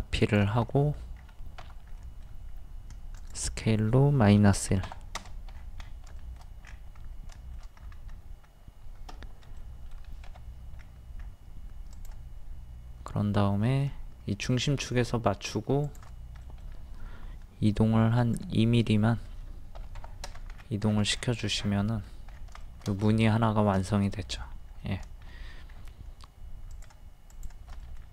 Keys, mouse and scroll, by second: 0.7 middle click, 1.2-1.6 scroll up 1, 2.0 scroll up 1, 3.2 click, 4.6 KP_1, 5.5-5.8 scroll down 1, 6.2 shift+middle click, 6.7-7.0 scroll up 1, 7.3 middle click, 7.8-8.3 scroll up 1, 9.6 middle click, 10.8 scroll up 1, 11.9 click, 16.4 middle click, 18.2 click, 19.8 KP_2, 20.5-20.9 scroll down 1, 21.6 middle click, 22.0 scroll down 1, 25.7-26.2 scroll up 1, 26.7 shift+click, 27.3 shift+click, 27.8-28.1 middle drag.